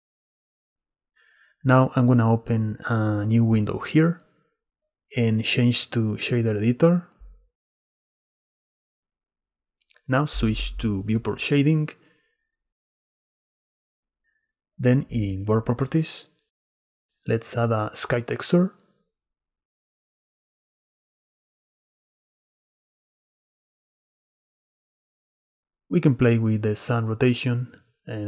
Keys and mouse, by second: 2.8 click, 3.0 middle click, 3.6 click, 5.1-7.3 drag, 7.9 click, 8.3-12.0 drag, 18.8-22.2 drag.